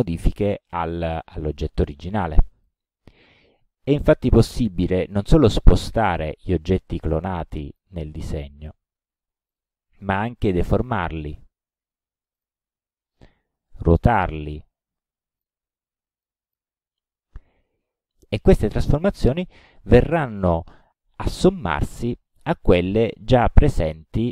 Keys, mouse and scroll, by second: 2.7 click, 4.0 click, 6.1-6.6 drag, 6.9-7.4 drag, 7.6-8.0 drag, 8.4 click, 9.5 click, 10.9-11.5 drag, 12.4 click, 13.3-13.8 drag, 15.0-15.7 drag, 16.3 click, 22.0 click.